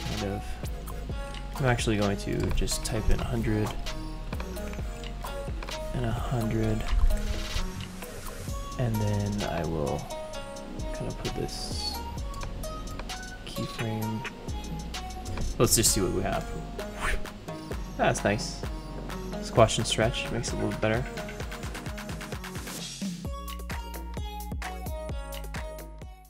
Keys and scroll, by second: 3.1 0, 5.8-7.2 typing, 7.5 Return, 16.0 ctrl+0.